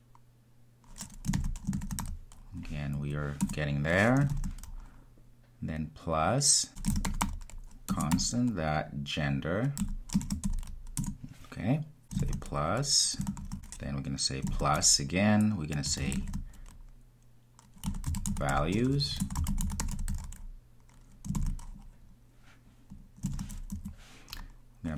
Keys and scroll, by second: 7.8 Return, 13.3 shift+Return.